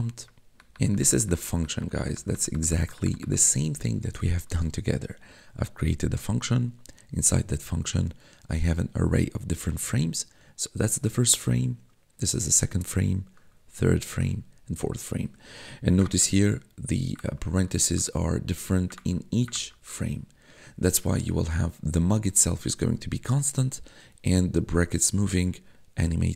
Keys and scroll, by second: 0.5 ctrl+=, 16.2 1, 17.2 1, 19.0 1.